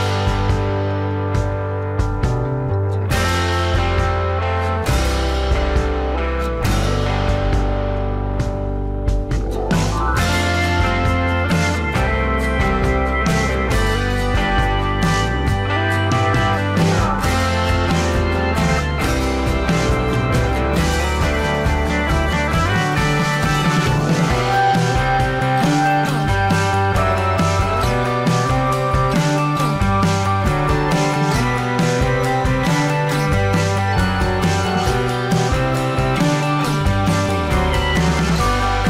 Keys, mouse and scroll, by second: 2.3 ctrl+d, 5.9 alt+scroll down 1, 8.3 alt+click, 10.6 alt+scroll up 1, 12.9 alt+scroll up 1, 19.5 alt+scroll down 1, 20.1 space, 21.4 alt+scroll up 1, 23.4-24.3 alt+scroll up 1, 29.5 alt+scroll down 1, 29.8 space, 31.9 alt+scroll up 1, 33.8-34.3 alt+scroll up 1, 34.5 alt+scroll up 1.